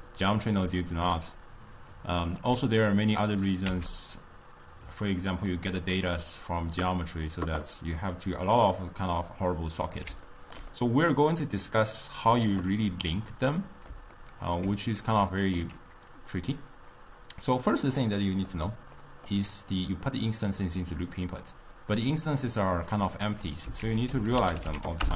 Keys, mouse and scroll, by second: 2.3 click, 4.1 x, 5.0-8.0 drag, 8.3-9.2 drag, 9.2-12.1 middle drag, 12.1 drag, 13.7-15.7 middle drag, 15.7 click, 19.0-19.6 middle drag, 19.6-22.8 drag, 23.9 ctrl+a.